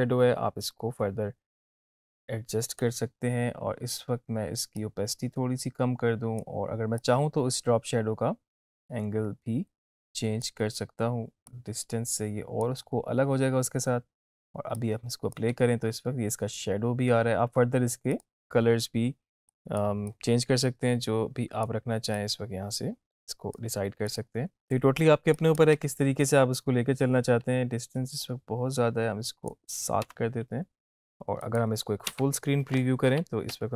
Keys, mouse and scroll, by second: 14.8-15.5 click, 15.7 space, 18.3-21.8 drag, 25.9 space, 28.4-29.9 drag, 30.2 space, 31.6 click, 33.2 Home.